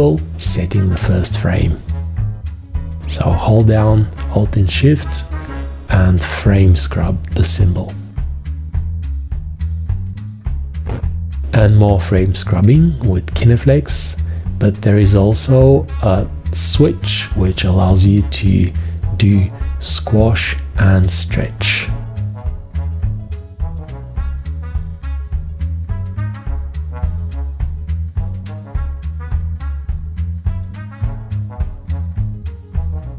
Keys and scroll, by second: 15.9 x, 18.1 x, 18.9 x, 24.8 g, 26.7 F1, 32.9 4.